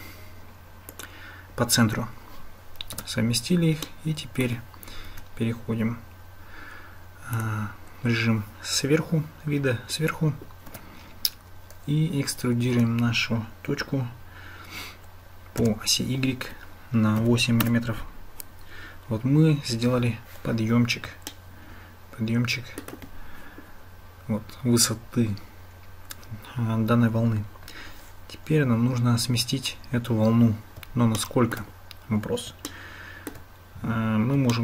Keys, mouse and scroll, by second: 3.0 Tab, 3.9-4.5 drag, 10.7 Tab, 12.8 e, 21.3-22.9 shift+middle drag, 31.2 shift+click, 32.8 shift+click, 34.5-34.6 shift+drag.